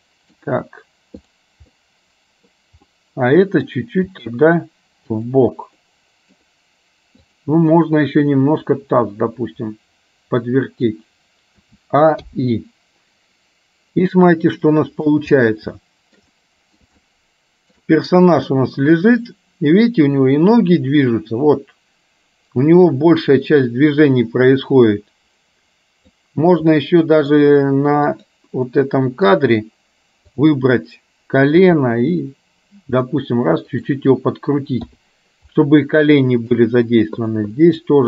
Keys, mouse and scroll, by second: 1.4 click, 1.8 middle click, 2.9 middle click, 4.1 g, 5.9-6.4 scroll up 1, 9.3-11.1 drag, 11.8 a, 12.4 i, 14.3-15.3 middle drag, 15.8 shift+middle click, 16.5 middle click, 17.1 shift+middle click, 18.8-26.3 drag, 26.9 middle click, 28.4 click, 28.8 middle click, 30.4 click, 31.8 g, 35.6-36.6 middle drag, 35.6 i, 37.3 click, 37.6-38.0 middle drag.